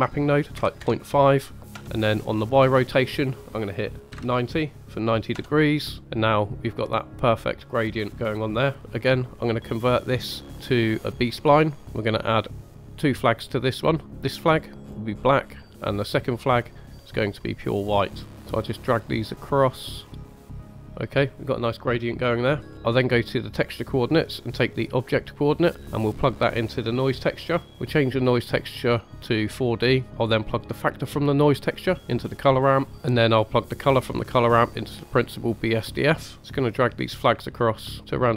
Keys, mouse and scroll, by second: 6.8-8.8 drag, 8.9 middle click, 9.8-11.2 drag, 11.6 scroll up 2, 12.3 click, 12.6 click, 13.6-14.2 drag, 16.7 click, 17.1 click, 18.4 click, 19.3 click, 20.1-20.8 drag, 22.6 scroll down 1, 22.7 middle click, 22.7 scroll up 1, 23.2 click, 24.4-28.2 drag, 28.2-29.5 drag, 30.5-32.1 drag, 32.9 middle click, 32.9 click, 36.4-38.3 drag, 36.4 middle click, 36.4 scroll up 2.